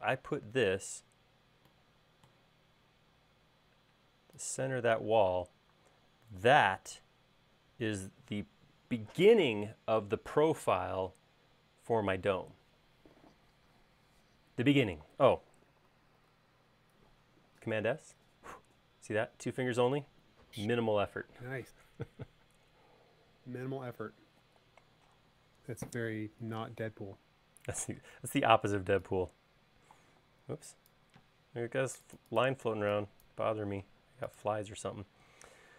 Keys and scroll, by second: 5.9 space, 16.8 super+s, 28.1 e, 31.2 Escape, 31.8 space, 33.3 e, 34.5 space.